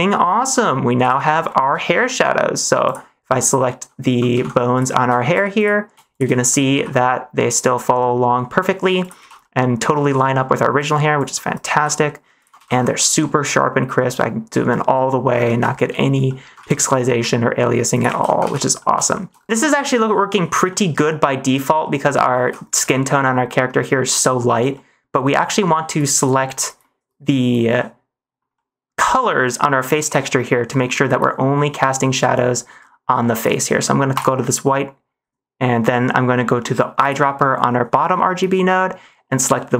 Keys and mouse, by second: 0.1-0.5 middle drag, 0.9 n, 1.2 middle click, 2.0 -, 2.3 middle click, 4.2 ctrl+Tab, 4.6 click, 6.3 -, 6.7 r, 9.2 ctrl+z, 9.3 middle click, 10.2 middle click, 10.7 -, 11.4 -, 11.7 r, 12.6 ctrl+z, 12.9 click, 13.0 middle click, 14.0-15.2 middle drag, 15.6 shift+middle click, 16.2 middle click, 16.6 ctrl+s, 17.1 r, 17.9 click, 18.2 ctrl+z, 18.4 ctrl+s, 18.7 middle click, 19.0 shift+middle click, 20.6 middle click, 21.8 middle click, 22.4 ctrl+s, 22.7 middle click, 24.6 middle click, 27.7 middle click, 28.4 middle click, 30.1 middle click, 34.0 click.